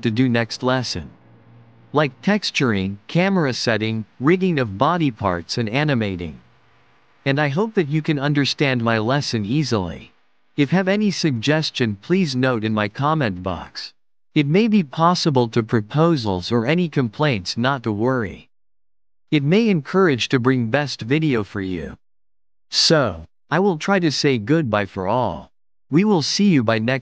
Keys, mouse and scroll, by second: 0.3-1.7 middle drag, 1.7-2.9 right drag, 2.9 click, 3.4-4.5 right drag, 4.5-5.3 middle drag, 5.3 click, 5.7-7.1 right drag, 7.1-9.5 middle drag, 10.0 click, 10.4-11.9 right drag, 11.9-12.4 middle drag, 12.4-13.0 scroll down 4, 13.0-13.7 shift+middle drag, 13.7 click, 14.1-15.5 right drag, 15.5 click, 16.3-18.6 middle drag, 20.4 click.